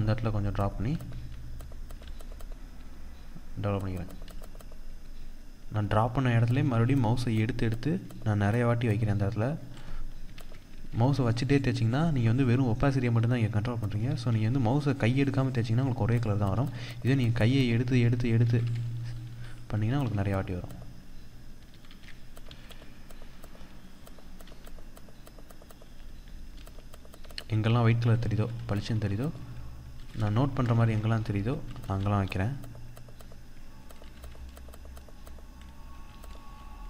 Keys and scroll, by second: 9.8 ctrl+z, 13.5 ctrl+z, 27.8 ctrl+-, 30.0 ctrl+z, 31.2 ctrl+=, 35.6 ctrl+-.